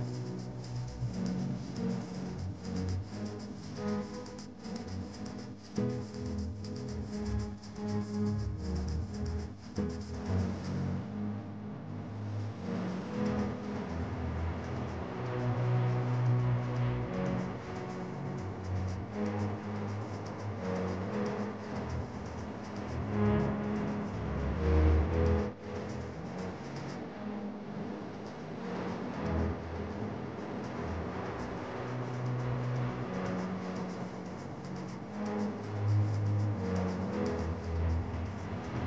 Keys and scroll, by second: 8.2 Up, 9.5 Up, 11.0 Up, 12.5 Up, 14.1 Up, 15.8 Down.